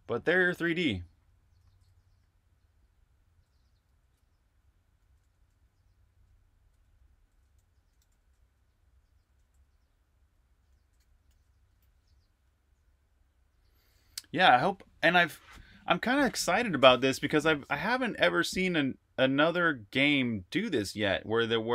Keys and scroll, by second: 0.0-5.2 typing, 6.5-11.0 typing, 11.1 super+q.